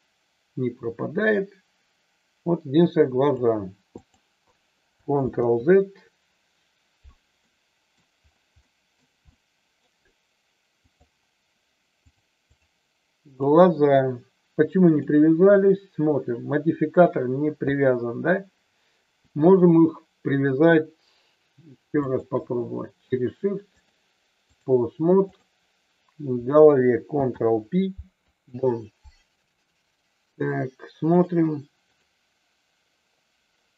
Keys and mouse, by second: 3.9 click, 5.2 ctrl+z, 7.4 middle click, 8.6 middle click, 9.3 middle click, 10.9 click, 12.0 click, 13.2 click, 22.0 shift+click, 23.8 click, 25.1 click, 27.0 ctrl+p.